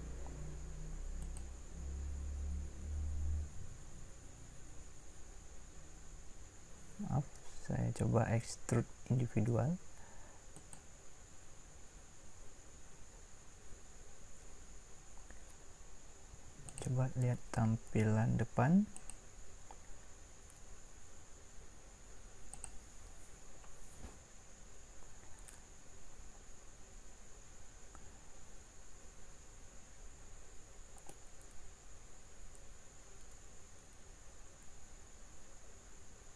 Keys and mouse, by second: 1.2-3.6 drag, 18.6 click, 25.3 click, 28.7-32.3 middle drag.